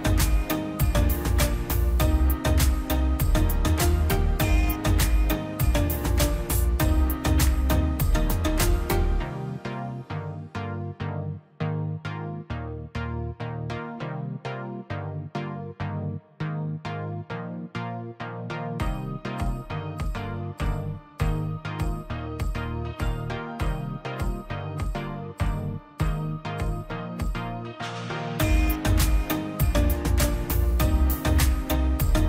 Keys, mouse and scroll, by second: 0.3 click, 0.4-1.4 scroll down 1, 1.4 click, 1.6 scroll up 1, 1.9 click, 3.0-3.3 scroll down 1, 3.3-4.1 scroll up 1, 4.7 click, 5.3 scroll up 1, 7.4-8.1 scroll up 1, 8.9 click, 9.0-9.4 scroll down 1, 10.3 click, 10.4 scroll down 1, 10.7 middle click, 11.2 scroll up 1, 11.8 middle click, 12.0 scroll up 1, 12.6 middle click, 13.3 scroll up 1, 13.6 click, 15.0 click, 19.5 click, 20.5-21.0 scroll up 1, 21.0 click, 23.9 click, 24.0-24.8 scroll down 1, 24.8 click, 24.9-25.3 scroll down 1, 25.5-25.9 scroll down 1, 26.5 click, 28.0 scroll down 1, 28.2 middle click, 29.0 click, 29.2 scroll down 1, 29.3 scroll up 1, 29.4 scroll down 1, 29.5-30.1 scroll up 1, 30.1 e, 30.3-30.6 scroll up 1, 30.6-32.2 drag.